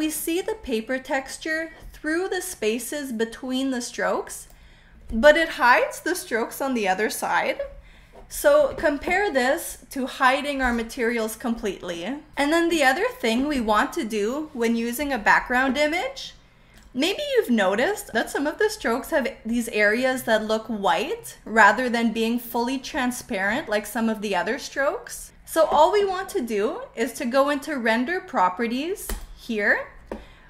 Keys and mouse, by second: 2.5-4.5 drag, 10.6 click, 16.7-17.8 drag, 29.0 click.